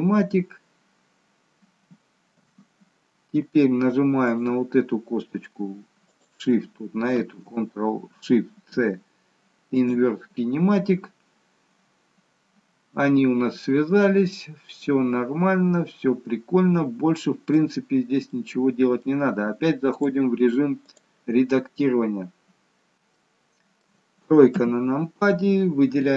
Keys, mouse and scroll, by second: 4.2 click, 6.1 shift+click, 8.7 ctrl+shift+c, 14.0 middle click, 17.8-18.3 scroll down 1, 18.3 middle click, 20.0 click, 21.5-22.8 scroll up 2, 23.0 shift+middle click, 24.5 KP_3.